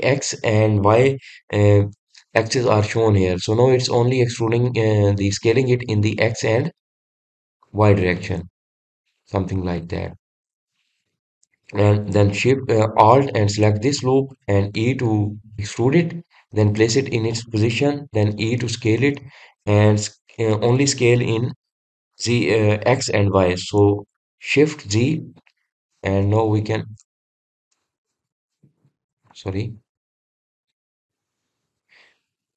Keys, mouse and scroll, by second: 9.7 shift+z, 10.0 click, 10.4-11.6 middle drag, 11.6-11.9 scroll down 1, 12.6-15.0 middle drag, 15.0 alt+click, 16.3 e, 30.8-32.5 middle drag.